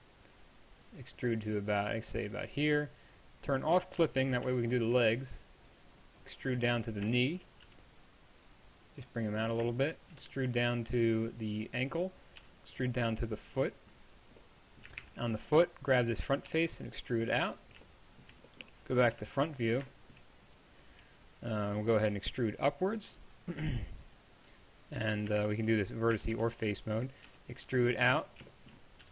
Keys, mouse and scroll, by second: 5.0-6.7 drag, 5.0 e, 7.7-9.1 drag, 7.7 g, 10.2-11.2 drag, 10.2 e, 12.4-14.5 middle drag, 12.4 e, 15.0 ctrl+Tab, 16.5 e, 19.2 KP_1, 22.1 e, 22.3 right click, 25.4 ctrl+Tab, 26.2 a, 26.3 b, 27.3 e, 29.0 g.